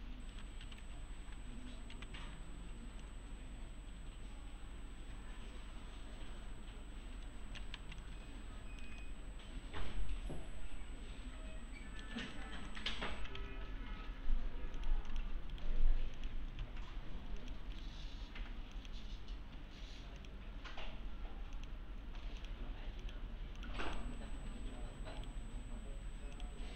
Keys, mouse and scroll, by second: 0.4-1.3 typing, 1.2-1.5 scroll down 1, 1.9 alt+w, 3.0-7.7 middle click, 7.8 alt+z, 8.0-8.9 alt+click, 9.0-12.1 middle click, 12.2 right click, 12.7 click, 12.9-13.9 typing, 13.7 scroll down 1, 14.8 click, 15.5 right click, 16.2 click, 16.5 ctrl+v, 17.4 click, 17.7 right click, 18.7 click, 25.2 right click, 26.3 click.